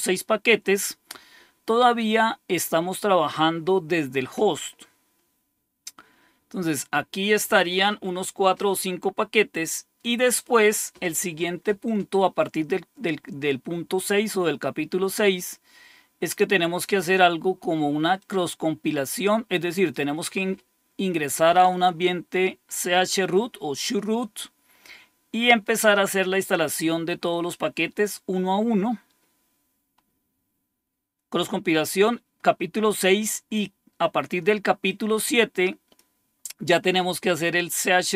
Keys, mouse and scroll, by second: 10.5-11.1 scroll down 1, 14.7-15.5 scroll down 1, 18.2-19.9 drag, 24.4-25.2 scroll down 2, 29.4-30.2 scroll down 2, 34.8-36.0 drag.